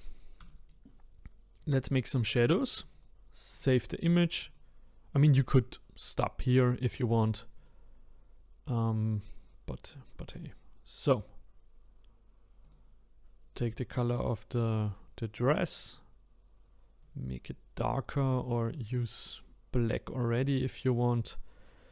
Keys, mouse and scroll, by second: 0.0-0.5 scroll up 3, 0.5-1.6 shift+middle drag, 1.6 click, 2.1-2.9 scroll down 1, 2.9-6.5 drag, 7.6-10.3 drag, 14.0 click, 15.6 click.